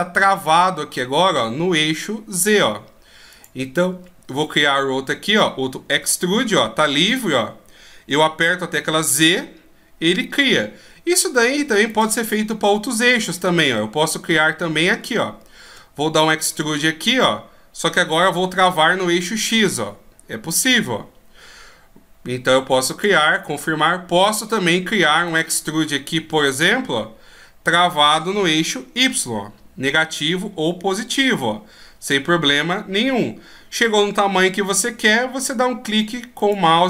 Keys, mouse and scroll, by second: 4.1-4.8 scroll down 1, 5.9 e, 13.2 right click, 14.3 scroll up 1, 15.1-16.4 scroll up 4, 16.6 e, 23.3 middle click, 25.2 right click, 26.1 e.